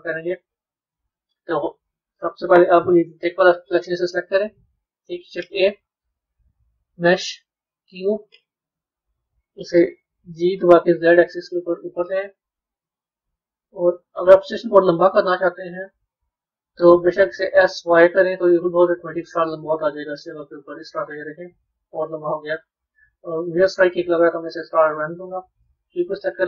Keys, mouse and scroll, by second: 0.8-3.0 middle drag, 3.0 click, 4.2-5.3 middle drag, 5.3 shift+a, 8.9 KP_3, 10.2 g, 13.3 click, 14.2 b, 16.5 Tab, 17.2 s, 21.1-22.9 middle drag, 22.9-23.4 scroll down 3, 23.4-25.8 middle drag, 25.8 click.